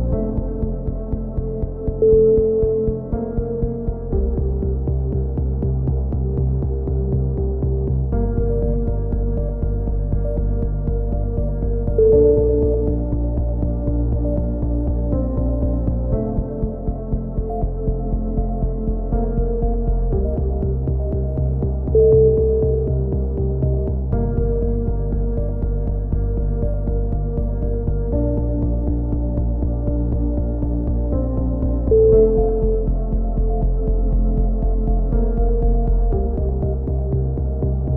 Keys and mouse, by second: 3.5-5.0 middle drag, 6.6 right click, 7.3 middle click, 7.5 right click, 9.0 ctrl+z, 9.3 right click, 9.8 middle click, 10.3 right click, 11.3 right click, 12.1 click, 12.1 right click, 18.5 click, 21.5-22.7 right drag, 26.9-28.0 middle drag, 28.0 z, 28.5 a, 29.3-30.4 middle drag, 29.8 z, 37.7-37.9 drag.